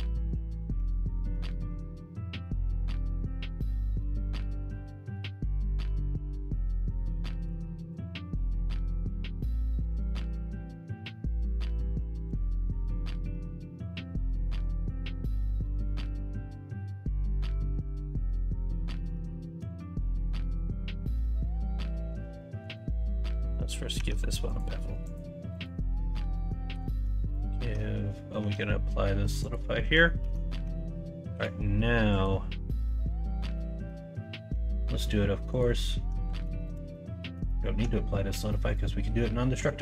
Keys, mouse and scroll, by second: 0.7 Tab, 1.0 middle click, 1.4 Tab, 3.8 Tab, 4.8 2, 6.8 click, 7.7 middle click, 8.1-9.8 middle drag, 9.8 Tab, 10.1-10.8 middle drag, 11.1-11.7 middle drag, 12.1 alt+z, 12.9 middle click, 14.9 ctrl+z, 15.0 middle drag, 15.5 middle drag, 16.7-17.8 middle drag, 19.7 ctrl+KP_Subtract, 21.0-21.9 middle drag, 22.2 ctrl+z, 23.4 Tab, 24.0 Tab, 26.0 Tab, 26.3 middle click, 26.7 2, 28.4 Tab, 30.2 ctrl+a, 30.6 Tab, 31.3 2, 33.5 middle click, 34.4 Tab, 36.3 ctrl+z.